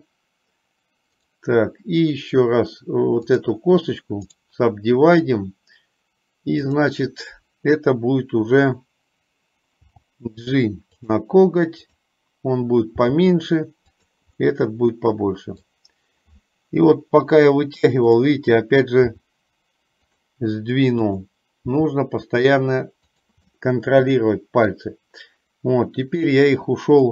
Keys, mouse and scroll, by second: 3.4 click, 6.8 click, 9.9 g, 13.0 g, 14.7-15.8 middle drag, 18.3 click, 19.2 g, 21.9 g, 23.8-25.0 middle drag.